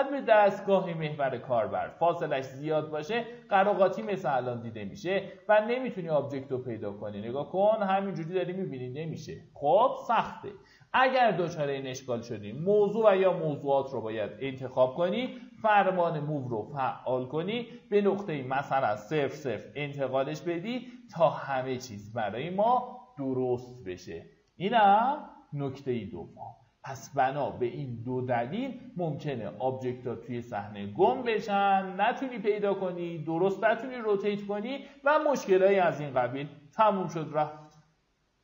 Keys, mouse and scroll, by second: 3.0 alt+middle click, 4.0 alt+z, 4.6 scroll down 1, 4.8-5.5 typing, 5.8 scroll up 1, 6.3 alt+middle click, 7.3-8.7 middle drag, 8.7-9.4 scroll down 1, 9.4-10.9 scroll up 1, 12.5 click, 15.2 w, 17.0 right click, 19.1 z, 19.9 scroll down 1, 20.3-22.0 alt+middle drag, 22.6 alt+q, 23.1 click.